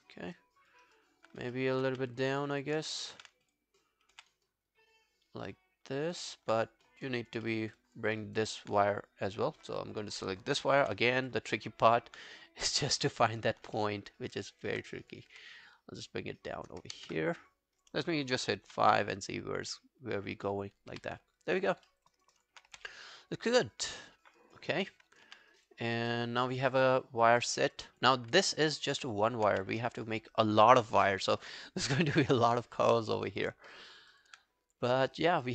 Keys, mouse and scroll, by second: 0.2 alt+scroll down 1, 0.4 alt+click, 0.9 alt+right click, 1.6 alt+middle click, 1.9 q, 6.1 w, 6.2 alt+middle click, 6.9 scroll down 2, 7.1 alt+click, 7.5 alt+middle click, 7.6 alt+scroll down 1, 7.8 alt+click, 8.2 alt+right click, 11.3 scroll up 2, 11.6 alt+click, 11.9 alt+middle click, 12.7 right click, 13.8 alt+middle click, 14.2 alt+scroll down 1, 14.5 alt+middle click, 15.3 w, 17.0 ctrl+z, 18.7 5, 20.9 q, 21.2 scroll down 2, 21.4 alt+click, 21.9 alt+middle click, 22.1 alt+right click, 22.4 alt+click, 22.7 w, 22.9 right click, 24.8 scroll down 1, 25.9 scroll down 2, 26.1 alt+middle click, 26.4 alt+click, 26.7 alt+right click, 27.0 alt+click, 27.4 alt+middle click, 27.7 alt+right click, 27.9 alt+click, 28.7 alt+middle click, 28.8 alt+scroll down 1, 28.9 alt+right click, 29.2 alt+click, 29.5 q, 32.4 scroll down 2, 32.9 alt+middle click, 33.2 alt+right click, 33.4 alt+click, 33.7 alt+middle click, 33.9 alt+right click, 34.1 alt+click, 35.1 alt+middle click, 35.3 alt+right click.